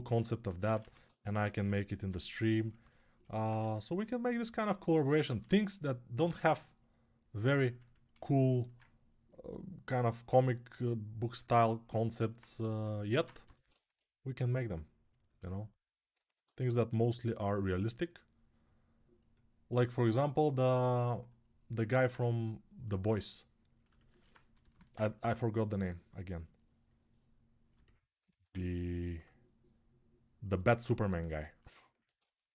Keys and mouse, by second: 5.9-8.5 ctrl+shift+right drag, 8.5-15.9 ctrl+drag, 13.2 g, 24.4 g, 28.2-32.5 ctrl+alt+drag.